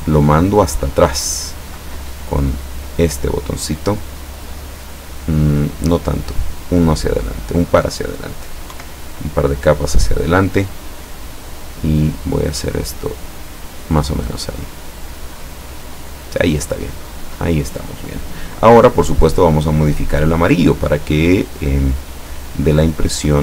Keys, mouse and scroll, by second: 2.9 click, 6.3 click, 6.8 click, 8.8 Right, 11.8-13.6 drag, 14.8 click, 17.1 click, 19.0 click, 23.1-23.4 drag.